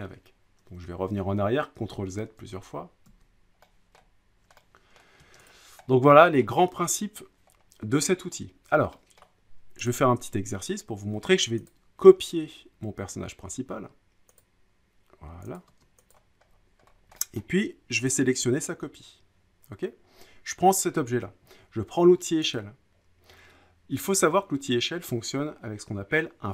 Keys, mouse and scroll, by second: 0.0 middle click, 1.8 ctrl+z, 2.4 ctrl+z, 3.1 ctrl+z, 3.9 middle click, 5.0 middle click, 5.5 click, 5.8-6.3 scroll down 3, 6.4 middle click, 9.2 middle click, 9.9 click, 11.7 click, 13.4 click, 14.4 click, 15.6 click, 16.1 click, 16.4-16.8 scroll down 4, 16.9 scroll up 3, 17.3 scroll, 17.4 middle click, 17.4 scroll up 1, 18.1 click, 22.5 click.